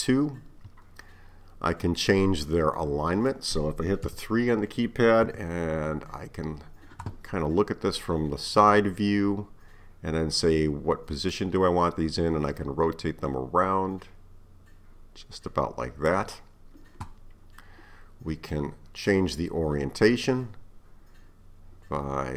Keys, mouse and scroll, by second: 2.8 scroll up 1, 2.8-4.1 middle drag, 4.1 KP_3, 5.3 KP_9, 11.3-14.4 drag, 18.5-21.5 middle drag.